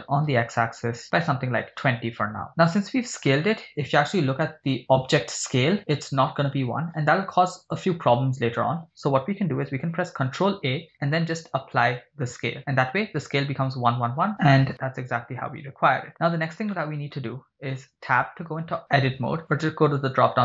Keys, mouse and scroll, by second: 0.3 x, 1.1 2, 1.2 0, 1.8 Return, 2.5 scroll down 7, 2.8 scroll up 3, 4.4 n, 10.3 ctrl+a, 14.3 n, 14.9-15.3 scroll up 4, 16.0 scroll down 3, 16.1 middle click, 16.7-17.2 shift+middle drag, 18.0 Tab, 20.0 click.